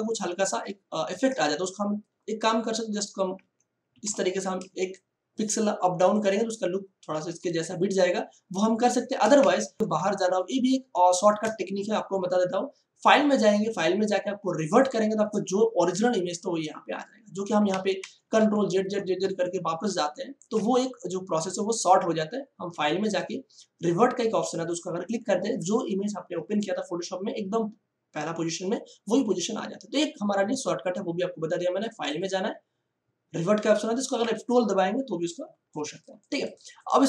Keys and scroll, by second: 3.3 Right, 3.9 Up, 4.6 space, 9.3 ctrl+alt+z, 17.7 ctrl+alt+z.